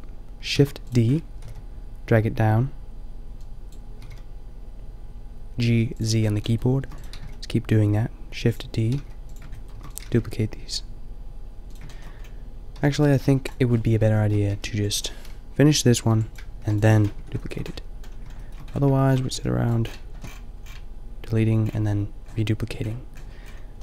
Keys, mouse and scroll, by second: 0.5 shift+d, 1.4 g, 4.1 g, 6.5-7.7 middle drag, 6.8 shift+d, 7.1 g, 8.9 g, 9.6 click, 9.8 shift+d, 10.0-11.0 drag, 10.1 g, 12.8 g, 13.3 Delete, 14.6 b, 16.0 b, 16.6 Delete, 17.1 Tab, 19.4 g, 19.8-21.6 middle drag.